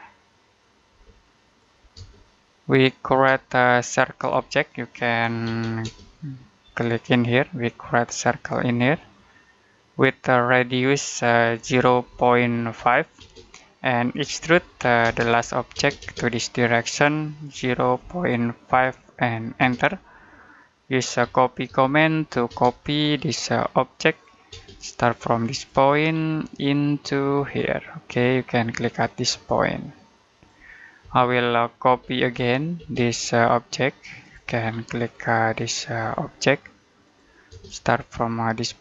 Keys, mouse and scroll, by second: 0.8 space, 1.3 click, 1.8 space, 3.3 shift+middle click, 5.3 c, 5.7 space, 6.2-7.3 scroll up 1, 8.8 click, 11.5-15.6 typing, 17.4-19.4 typing, 20.2 middle click, 21.1-22.3 typing, 22.7-23.3 scroll up 1, 24.0 click, 24.4 space, 25.4 click, 25.8-26.2 scroll down 1, 26.2 middle click, 27.2-27.9 scroll up 1, 30.2 click, 30.9-32.6 typing, 31.3 middle click, 34.1 click, 34.4-34.7 scroll down 1, 34.7 middle click, 35.8-36.9 scroll up 1, 36.9 click, 37.4 space, 38.7 click.